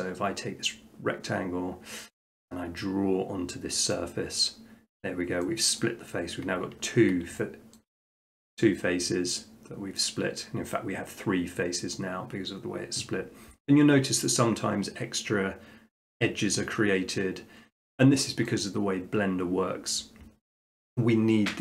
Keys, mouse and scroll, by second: 2.1 click, 3.9 click, 5.8 middle click, 6.2 middle click, 6.9 middle click, 7.8 shift+middle click, 18.5 middle click.